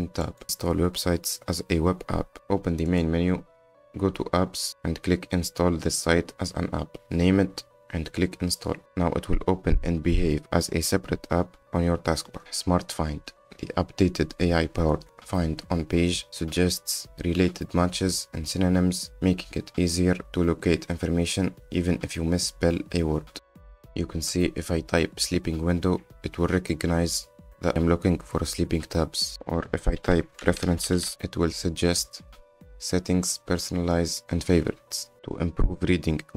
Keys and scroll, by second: 35.1 F10.